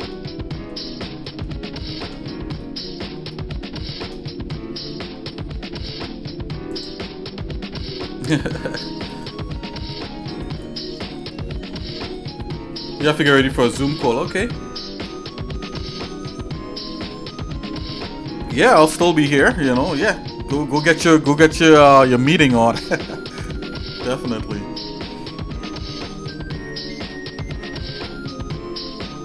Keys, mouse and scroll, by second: 0.7 scroll up 1, 1.2 middle click, 2.0 Tab, 2.6 middle click, 3.3 shift+middle click, 4.3 middle click, 6.7 click, 23.5 shift+middle click, 24.7 scroll up 1, 25.3-26.3 shift+middle drag, 26.7 shift+middle click, 27.5 middle click, 28.0 shift+middle click.